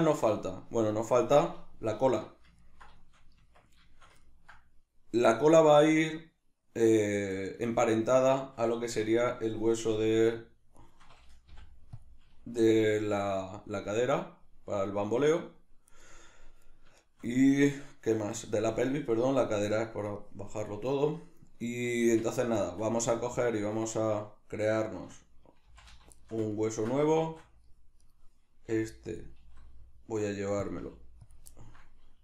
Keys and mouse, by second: 2.0 alt+q, 2.6 ctrl+middle click, 3.4 Tab, 3.9 shift+middle click, 7.4 right click, 8.8 Tab, 10.9 right click, 11.5 ., 12.5 r, 16.0 right click, 17.0-28.0 shift+middle drag, 22.0 Tab, 25.7 shift+c, 27.2 shift+a, 28.0 right click, 28.7 g, 29.2 click, 29.4 s, 30.7 click, 30.8 g, 31.3 click, 31.6-32.2 ctrl+middle drag.